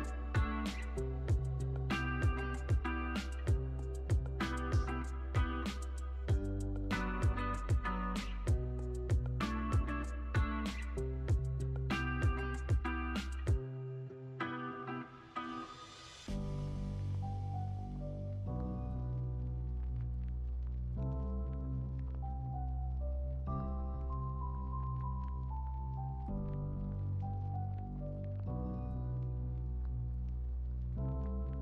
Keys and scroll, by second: 20.0 x, 21.0 super+c, 21.2 super+v, 21.8 super+c, 22.0 super+v, 22.7 super+c, 22.9 super+v, 23.5 super+c, 23.7 super+v, 24.3 super+c, 24.5 super+v, 25.8 super+s.